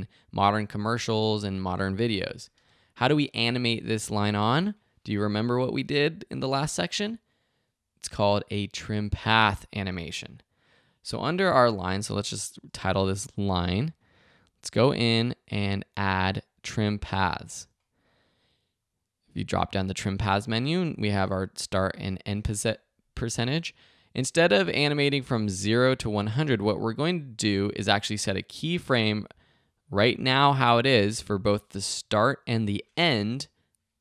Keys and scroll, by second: 2.5 space, 12.0 Return, 12.3-13.5 typing.